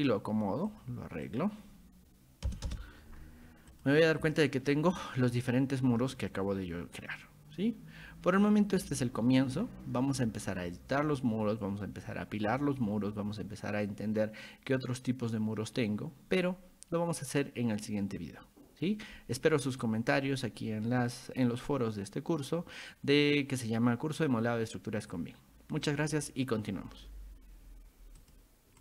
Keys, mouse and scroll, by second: 0.0 click, 0.7 click, 1.3 click, 3.7 click, 4.3 shift+middle click, 5.0 middle click, 9.1-10.0 shift+middle drag, 28.2 click.